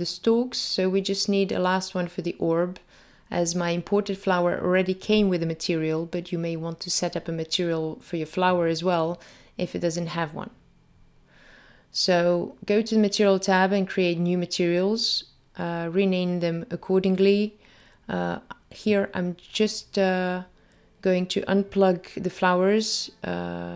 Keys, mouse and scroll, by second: 0.6 shift+a, 10.8 click, 12.2 click, 13.3 click, 15.2 click, 15.4 click, 20.3 click, 21.8 click, 21.9 click.